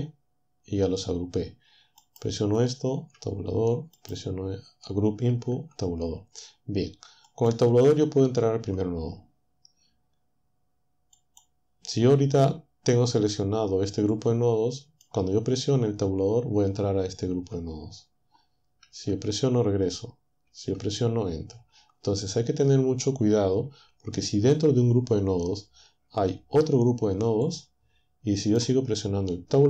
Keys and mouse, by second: 2.0-3.2 drag, 3.2 Tab, 4.0-5.5 drag, 5.6 Tab, 7.3 click, 8.6 Tab, 11.2 click, 14.2-15.2 drag, 17.4 Tab, 18.8 Tab, 20.5 Tab, 21.7 Tab, 27.4-28.8 drag.